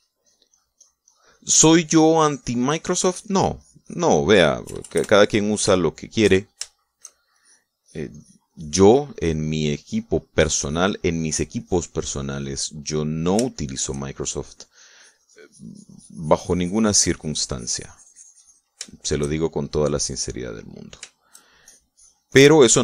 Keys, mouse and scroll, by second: 0.5 shift+click, 5.7 KP_Add, 6.8 shift+click, 8.3 shift+click, 8.8-11.9 drag, 12.0 middle click, 12.6-13.9 drag, 13.9 middle click, 14.5 shift+middle click, 15.3 shift+middle click, 16.0-19.8 drag, 19.9-21.0 shift+middle drag, 21.1 click, 21.7 middle click, 22.7-22.8 shift+drag.